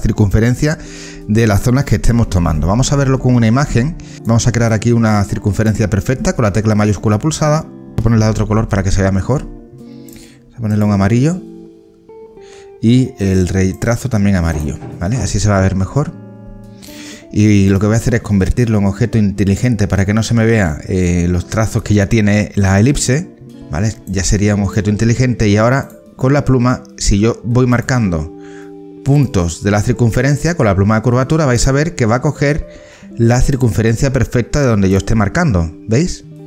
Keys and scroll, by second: 2.0 ctrl+z, 8.1 ctrl+z.